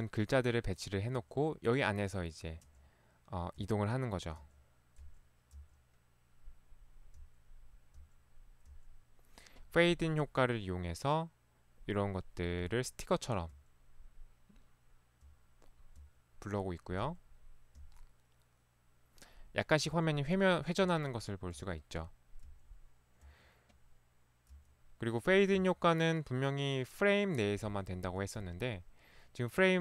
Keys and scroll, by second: 1.2 Right, 3.7 Right, 4.5 Right, 5.5 Right, 7.1 Right, 8.0 Right, 8.7 Right, 12.7 Right, 13.5 Right, 15.4 Right, 16.1 Right, 17.1 Right, 17.8 Right, 20.0 Right, 20.9 Right, 21.6 Right, 22.5 Right, 23.2 Right, 24.6 Right, 25.6 Right, 27.7 Right, 28.4 Right.